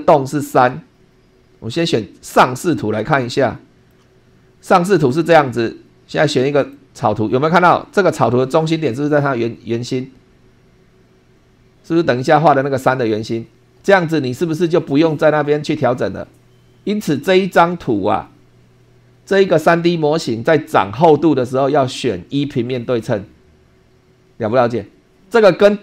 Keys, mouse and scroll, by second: 2.2 click, 3.2 shift+middle click, 5.1 shift+middle click, 6.6 click.